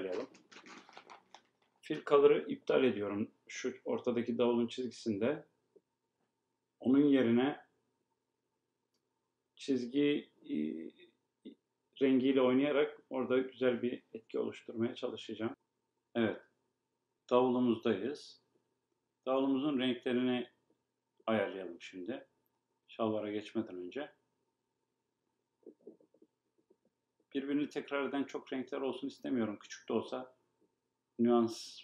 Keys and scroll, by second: 2.7 Escape.